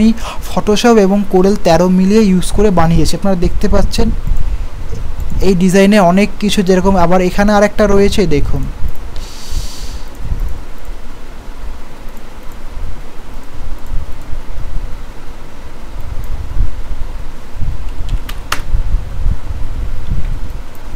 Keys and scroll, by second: 20.2 ctrl+z.